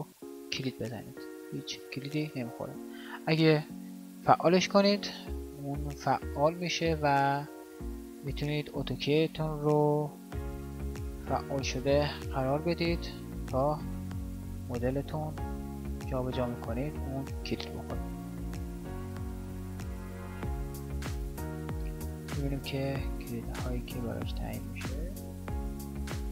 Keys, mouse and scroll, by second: 6.4 g, 10.8 g, 14.3-16.0 drag, 14.3 g, 17.1-20.8 drag, 17.3 g, 25.4 g.